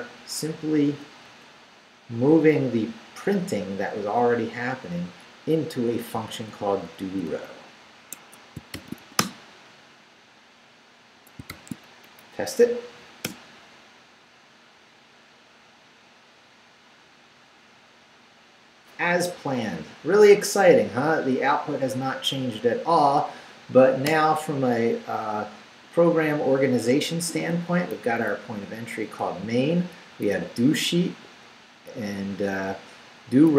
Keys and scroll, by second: 0.2 BackSpace, 6.2-9.0 typing, 8.1 Escape, 9.2 Return, 11.5 shift+;, 12.0 shift+Up, 13.2 Return, 24.1 Return, 27.5 Down, 28.3 Left, 29.2 Down.